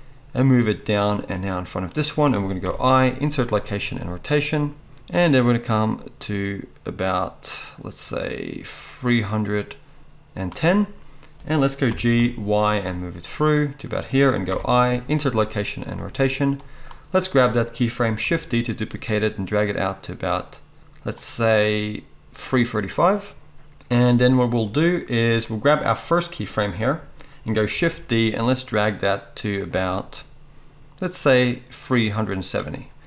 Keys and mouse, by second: 2.0-5.5 middle drag, 3.6 i, 5.5-14.4 drag, 11.9 g, 14.4-16.6 middle drag, 14.5 i, 16.6-20.8 drag, 18.2 shift+d, 20.8 middle click, 21.2-29.6 drag, 27.7 shift+d, 29.6 middle click, 30.1-33.0 drag.